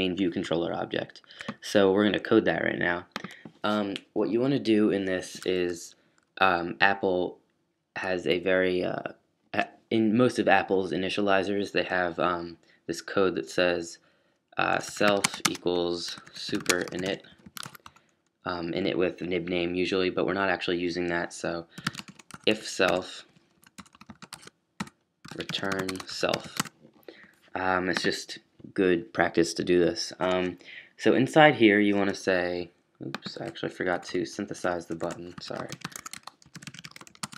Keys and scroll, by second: 14.5-18.1 typing, 20.3 typing, 21.5-27.0 typing, 24.3 shift+super+s, 33.7 fn+Down, 34.6 fn+Up, 34.7-37.3 typing.